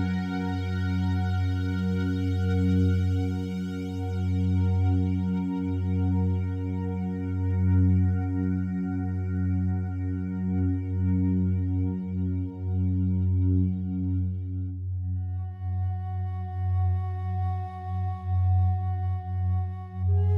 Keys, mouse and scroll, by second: 1.1-2.9 shift+drag, 2.5-3.4 typing, 5.0 click, 7.5 click, 8.2 click, 9.2-11.4 drag, 11.6-12.6 typing, 12.7 Escape, 13.9 click, 14.6-15.6 typing, 16.9 click, 18.2-19.8 drag, 20.1-20.3 typing.